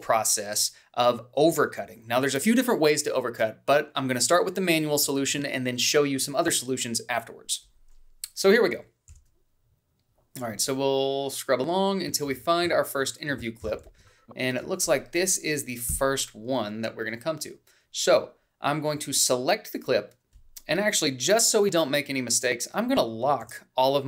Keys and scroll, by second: 10.1 h, 14.9 h, 15.7 a, 16.9 Up.